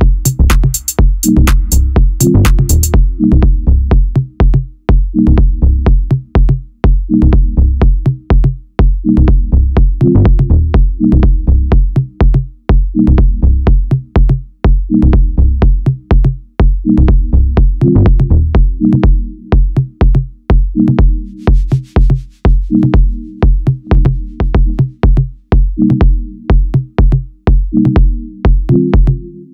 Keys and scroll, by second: 8.1 ctrl+3, 8.9 w, 12.1 Tab, 12.6 2, 13.1 e, 14.9 shift+g, 15.5 ctrl+b, 16.4-24.6 typing.